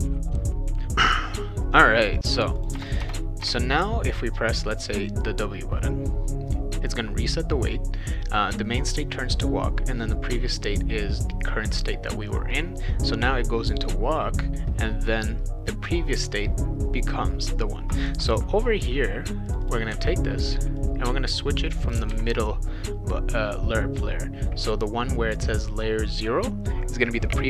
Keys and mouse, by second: 0.0 click, 0.4 click, 2.2 click, 2.6 click, 2.7 BackSpace, 3.0 BackSpace, 3.4 BackSpace, 19.5 click, 19.6 click, 19.9 ctrl+c, 20.8-21.9 drag, 22.1 ctrl+v.